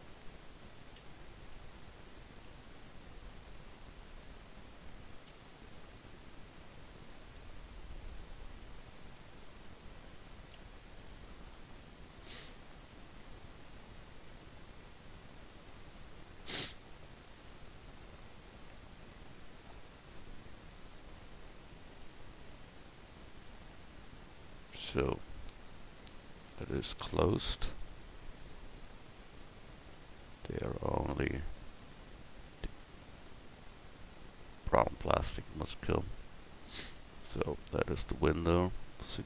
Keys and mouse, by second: 1.0 f, 5.3 f, 10.5 f, 17.3 click, 18.3-20.8 right drag, 19.6 x, 23.4 f, 23.9 Tab, 27.0 Tab, 29.5 right click, 31.6-33.4 drag, 34.5 Tab, 37.3 KP_1.